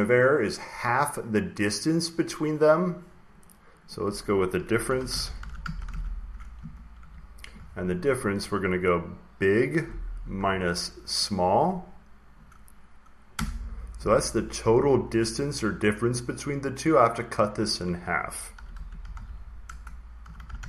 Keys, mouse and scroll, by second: 0.1 click, 0.8 click, 1.3 click, 1.7 click, 2.3 click, 3.3 click, 3.8 click, 4.5-6.9 typing, 9.5-12.3 drag, 12.4 click, 13.2 Return, 18.1 Left, 18.2-20.6 typing.